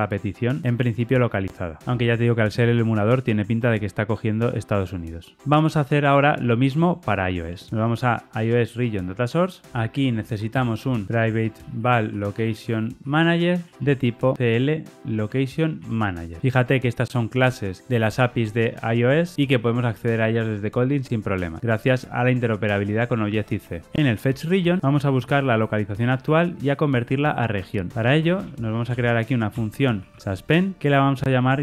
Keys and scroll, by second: 13.8 Tab, 15.7 Tab, 29.4 Return, 30.8 Tab.